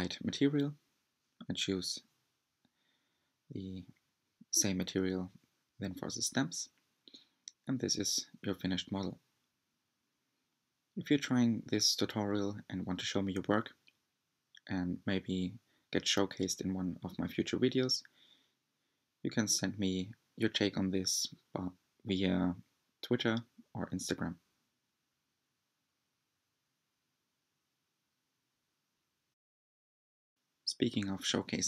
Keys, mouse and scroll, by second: 0.4 scroll down 1, 0.5 Tab, 0.5 Tab, 0.5 shift+middle click, 0.6 click, 0.9 scroll up 1, 0.9 shift+middle click, 1.0 shift+scroll down 5, 1.1 shift+middle click, 1.2 scroll up 1, 1.3 g, 1.8 Tab, 1.9 middle click, 2.0 scroll down 4, 2.1 middle click, 2.2 scroll up 2, 2.3 middle click, 2.4 Tab, 2.7 click, 2.9-3.2 scroll down 3, 3.4-4.5 drag, 4.5-5.5 scroll up 9, 5.5-6.1 scroll up 1, 6.1 scroll up 1, 6.2-7.5 middle drag, 7.5-8.1 scroll up 2, 8.5-11.8 middle drag, 16.9-19.1 middle drag, 22.6 click, 23.6-26.6 drag.